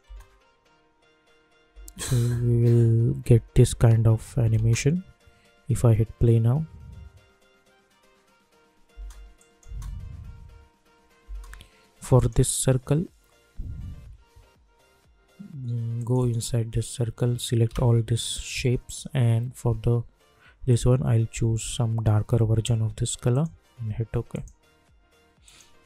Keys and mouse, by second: 0.0 space, 4.2 n, 4.5 space, 8.9 space, 9.3 click, 9.6 space, 12.1 click, 15.9 click, 17.7 ctrl+a, 18.8-23.3 drag.